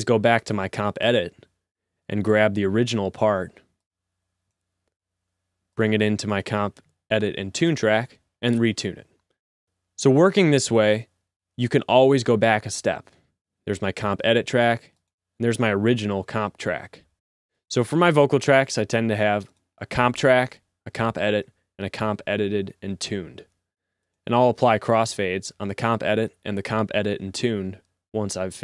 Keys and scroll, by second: 2.7 t, 2.9 t, 4.7-5.6 typing, 7.9 v, 9.3 z, 25.7-26.8 typing.